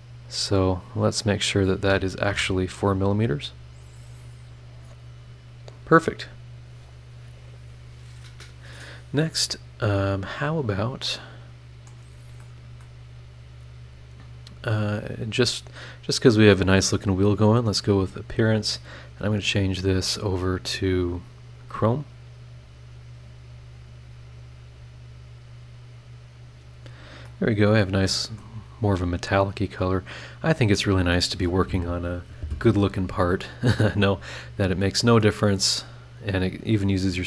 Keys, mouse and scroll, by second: 1.3 click, 2.3 KP_4, 3.8 click, 4.7-5.5 scroll down 4, 6.7 click, 9.3 scroll up 2, 10.6 scroll down 2, 11.0 middle click, 11.1 click, 12.1 scroll down 1, 12.4 middle click, 13.0-13.7 scroll up 2, 13.2 middle click, 15.5 click, 17.3 click, 18.6-19.4 drag, 20.8 click, 24.7-25.0 scroll up 1, 25.8 click, 26.9 scroll down 1, 27.2 middle click, 27.3-28.6 right drag, 30.0 click, 30.6 click, 34.3 scroll up 2, 34.8 scroll down 2, 35.2 middle click, 35.2-37.0 right drag.